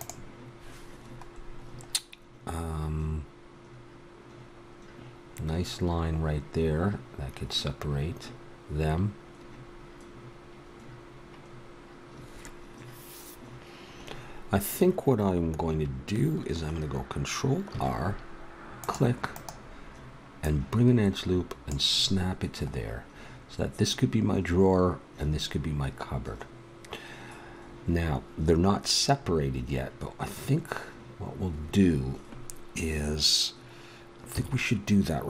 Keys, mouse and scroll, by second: 17.7 ctrl+r, 20.4 click, 22.0-24.4 middle drag, 34.3 a.